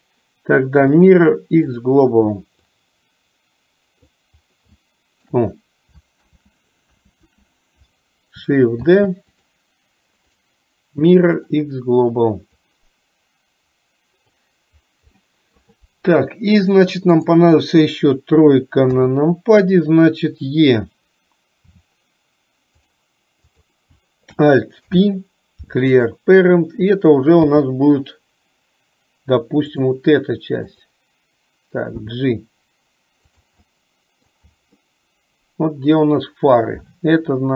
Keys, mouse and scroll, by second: 2.8-4.2 drag, 4.7 shift+middle click, 10.3-11.6 right drag, 12.6-14.4 drag, 15.2 middle click, 17.2 click, 30.8 click, 33.7 middle click, 34.7-36.1 middle drag.